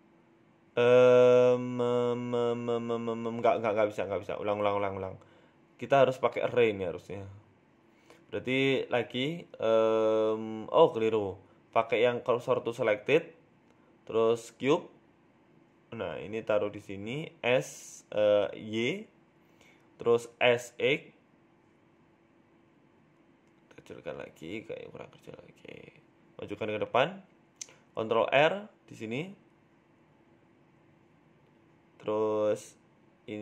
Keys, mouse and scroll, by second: 0.5 shift+middle click, 4.6 ctrl+z, 5.2 shift+middle click, 5.5 Tab, 5.7 scroll down 1, 5.9 middle click, 7.7 KP_1, 8.0 scroll up 2, 8.2 shift+middle click, 9.6 shift+a, 12.2-12.9 scroll down 4, 12.5 ctrl+z, 12.9 shift+s, 14.2 scroll up 3, 14.4 shift+a, 15.8 s, 18.5 scroll down 1, 18.7 middle click, 19.3 s, 21.8 KP_1, 22.2 s, 24.6 s, 26.0 middle click, 26.7-27.2 scroll up 2, 27.2 g, 28.8 ctrl+r, 29.3 Tab, 29.8 ctrl+r.